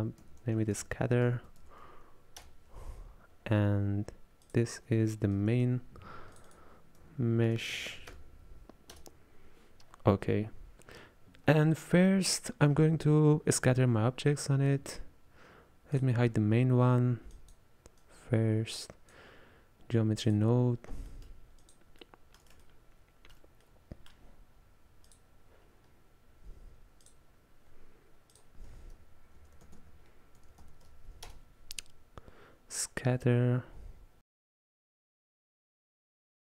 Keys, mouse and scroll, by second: 1.4 t, 4.5 click, 6.4-11.4 drag, 16.0 drag, 17.4 click, 18.1-21.1 drag, 21.1-21.7 middle drag, 21.7 click, 22.1-25.1 middle drag, 25.1 click, 27.1-30.6 drag, 30.6 t, 35.9 click.